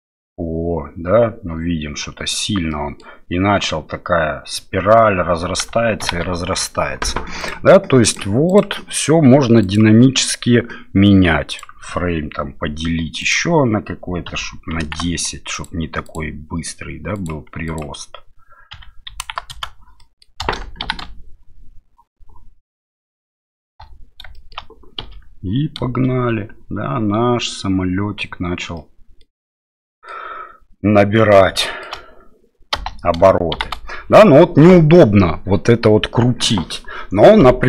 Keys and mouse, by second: 2.7 middle click, 5.2 space, 6.0 shift+Left, 7.5 click, 8.5-15.7 drag, 16.2-19.7 drag, 20.0 middle click, 20.8 shift+Left, 22.9 middle click, 23.7 space, 24.3 shift+middle click, 25.0 KP_7, 28.8 middle click, 29.8 middle click, 31.6 shift+middle click, 32.8 space, 33.5 shift+Left.